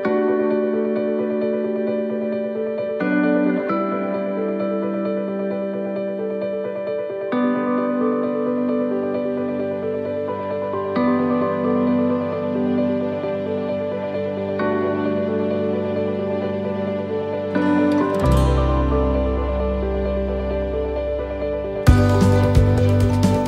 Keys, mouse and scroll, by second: 0.4 middle click, 1.4 middle click, 2.5 click, 3.7 middle click, 6.6 click, 8.2 middle click, 9.1 click, 11.2 middle click, 12.0 shift+middle click, 12.5-13.0 scroll up 2, 13.3 right click, 13.9 shift+right click, 14.9 shift+middle click, 14.9 shift+right click, 16.7 click, 18.4 right click, 18.7 middle click, 21.3 middle click, 21.3 click.